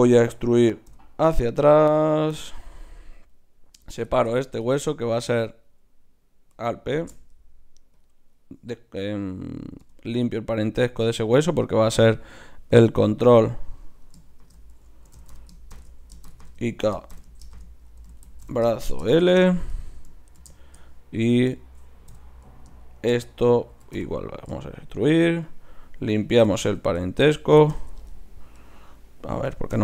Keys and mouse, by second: 3.3-5.1 right drag, 4.3 ctrl+p, 6.9 alt+p, 9.3-11.0 right drag, 9.9 g, 10.7 z, 11.8 z, 12.7-14.6 drag, 20.2-22.5 middle drag, 22.1 KP_7, 22.7 middle click, 22.9-24.8 drag, 23.7 e, 25.4-27.2 drag, 26.7 alt+p, 27.7 ctrl+p, 29.7 alt+p.